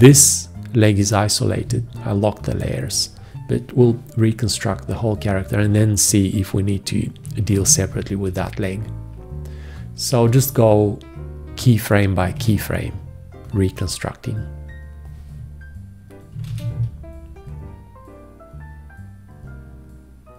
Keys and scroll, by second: 7.8 ctrl+`, 12.6 ctrl+`, 16.7 ctrl+`.